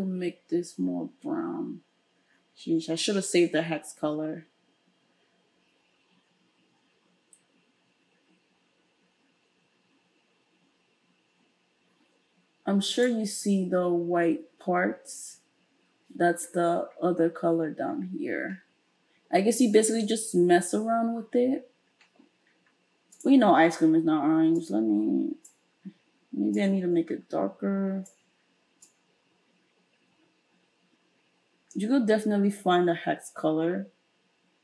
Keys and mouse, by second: 0.6-3.0 drag, 3.0-4.4 middle drag, 4.4 click, 4.9 middle click, 5.4 click, 6.2-29.2 middle drag, 29.2-32.1 drag, 32.1-34.6 middle drag.